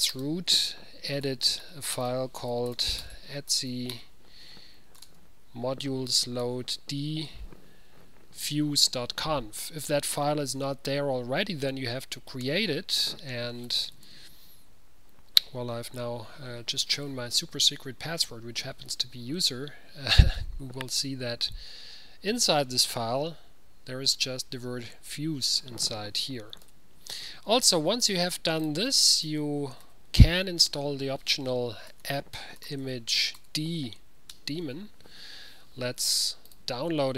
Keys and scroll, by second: 0.0-5.6 typing, 5.7 Tab, 6.6 Tab, 12.6 Return, 13.6-14.6 typing, 26.7 ctrl+x, 30.0 ctrl+a, 31.8-34.0 typing, 34.4 Return.